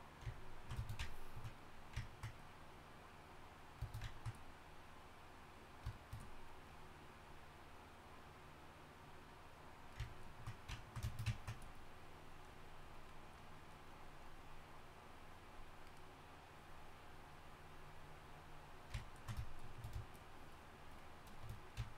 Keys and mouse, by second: 3.9-10.1 drag, 16.6-19.0 drag, 19.6-21.9 drag.